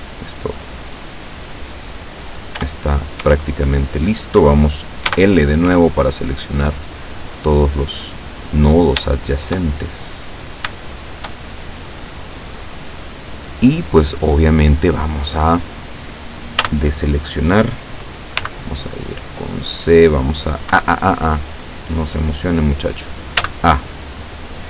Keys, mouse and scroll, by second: 2.6 Tab, 3.3 Tab, 5.2 l, 6.0-8.8 drag, 9.2 shift+middle click, 9.9 shift+scroll up 1, 10.2-12.4 middle drag, 12.9 click, 13.9-15.3 middle drag, 16.7 a, 18.4 c, 19.1-20.7 drag, 20.7 Escape, 23.4 a.